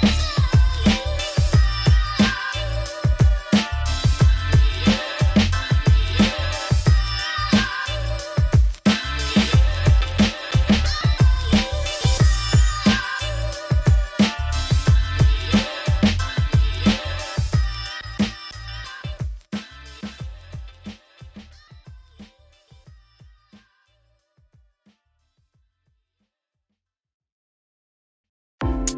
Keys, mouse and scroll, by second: 1.9-3.6 middle drag, 3.9 Tab, 4.0 s, 7.9 Left, 8.8 Left, 9.1 ctrl+b, 12.5-13.9 drag, 16.7-17.8 drag, 18.8 middle click, 19.0 e, 19.8 Tab, 20.3 right click, 20.9-24.9 drag, 25.0 scroll up 1, 25.8-27.0 shift+drag, 28.1 middle click, 28.2 scroll down 3, 28.4 middle click, 28.9 Tab.